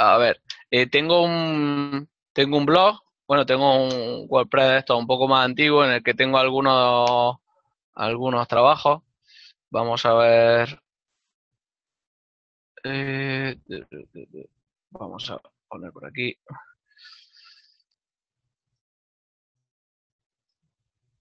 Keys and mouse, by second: 11.4 click, 17.7 d, 20.3 Right, 20.5 Return.